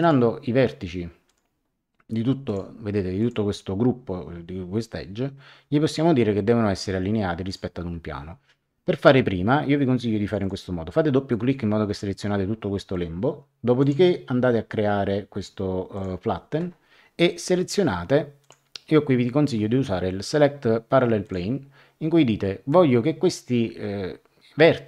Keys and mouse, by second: 0.0 click, 1.2 click, 2.4 click, 7.4 click, 10.2 click, 13.8 click, 15.9 click, 18.4 click, 21.2 click.